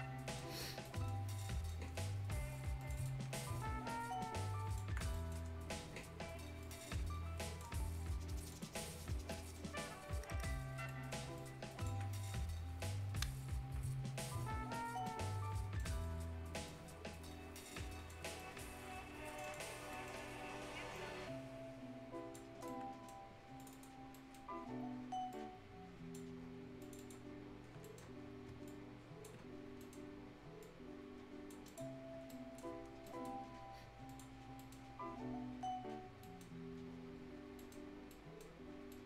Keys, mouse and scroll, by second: 0.4 scroll down 1, 0.6 scroll up 1, 0.8 right click, 1.8 scroll up 1, 2.8 click, 3.2 scroll down 1, 3.3 right click, 4.2 ctrl+click, 4.9 ctrl+scroll up 1, 5.1 right click, 5.4-6.4 scroll up 1, 6.6 click, 7.8-8.3 scroll up 1, 8.3 click, 8.7 scroll down 1, 9.0 right click, 9.7-10.2 scroll up 1, 10.8 scroll down 1, 10.8 right click, 11.3 ctrl+click, 12.1 right click, 12.5-13.7 scroll up 1, 14.7-15.0 scroll down 1, 15.0 right click, 16.0 scroll up 1, 16.6-18.2 drag, 18.2-18.8 scroll up 2, 18.3 right click, 19.2 click, 19.7 scroll down 1, 19.9 right click, 20.1-20.7 scroll up 1, 20.9-22.4 drag, 22.4 scroll down 1, 22.6 right click, 23.2 scroll up 1, 23.5 click, 23.9 scroll down 1, 24.1 right click, 24.6 scroll up 1, 25.3 click, 26.3 scroll up 1, 26.8 click, 27.4-27.8 scroll up 1, 27.8 right click, 28.0 scroll down 1, 28.6 ctrl+click, 29.3-29.7 ctrl+scroll up 2, 29.7 right click, 30.6 click, 31.9 scroll down 1, 32.2 right click, 32.7 scroll down 1, 32.9-33.5 scroll up 2, 33.0 right click, 34.0 click, 34.3-34.9 scroll down 2, 34.5 right click, 36.2 right click, 36.7 scroll up 1, 37.5 right click, 37.8 scroll down 1, 38.1 right click, 38.5 scroll up 1, 38.9 right click.